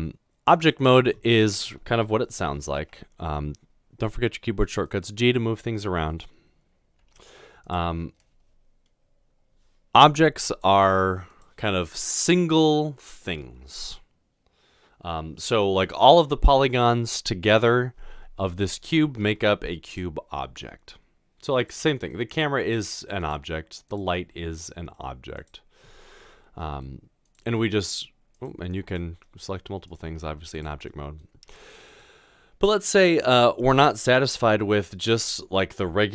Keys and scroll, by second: 2.9 g, 7.1 typing, 10.9 typing, 22.6 typing, 24.2 typing, 27.5 typing, 30.1 typing, 31.4 typing, 34.2-35.1 typing.